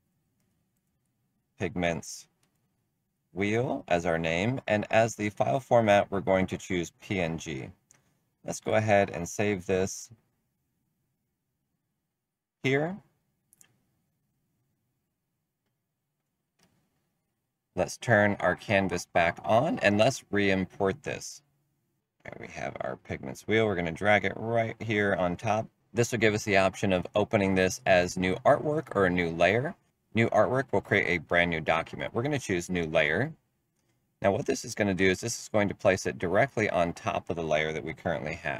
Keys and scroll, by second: 0.0-4.0 typing.